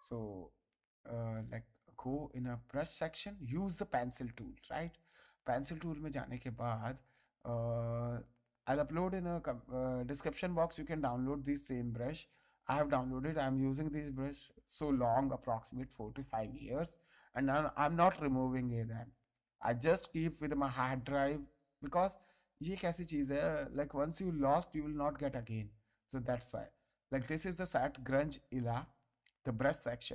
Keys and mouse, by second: 1.3 click, 2.7 right click, 4.0 click, 29.9 click.